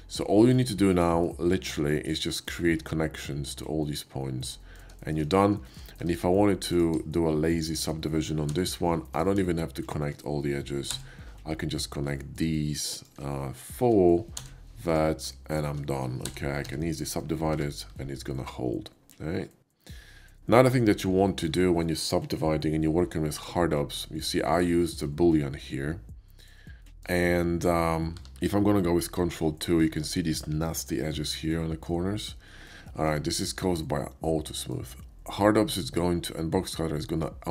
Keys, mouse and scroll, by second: 0.1-1.2 shift+middle drag, 2.1 KP_5, 2.4 middle click, 4.5 shift+middle click, 5.0 shift+middle click, 5.7 middle click, 6.0 Tab, 6.6 click, 7.6 shift+click, 8.4 j, 9.0 click, 9.6 shift+click, 10.7 middle click, 10.7 j, 11.5 middle click, 12.2 shift+middle click, 12.8 shift+click, 13.6 shift+click, 14.4 j, 14.8 click, 15.4 shift+click, 16.2 j, 16.5 Tab, 17.4 ctrl+2, 17.4 ctrl+3, 18.3-20.0 middle drag, 20.3-20.7 middle drag, 21.3 shift+middle drag, 23.2-23.9 shift+middle drag, 24.1 scroll up 1, 24.4 middle click, 24.8 middle click, 26.8 shift+middle click, 28.0 ctrl+1, 28.3 ctrl+2, 28.6-29.4 middle drag, 29.6 shift+middle click, 32.5 shift+middle drag, 32.9 middle click, 33.4-34.7 middle drag.